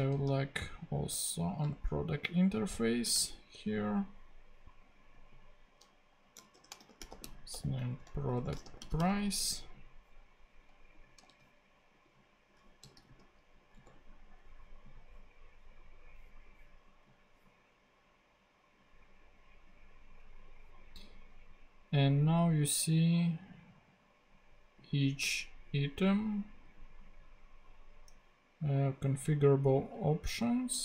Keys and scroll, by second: 0.0 super+c, 1.7 super+v, 3.0 space, 6.3-9.3 typing, 11.3 super+c, 13.7 super+..